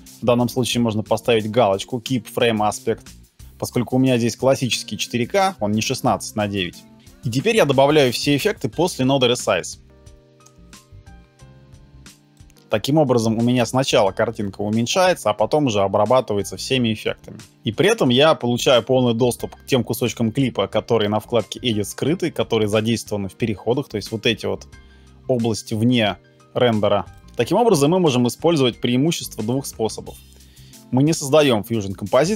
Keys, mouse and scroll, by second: 7.7 shift+space, 10.0 Down, 10.5 Return.